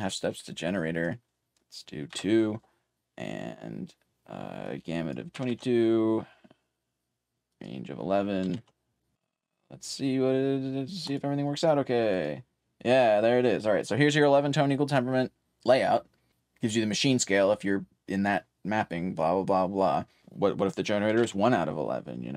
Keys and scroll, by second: 0.4-11.1 typing, 21.6-22.3 typing.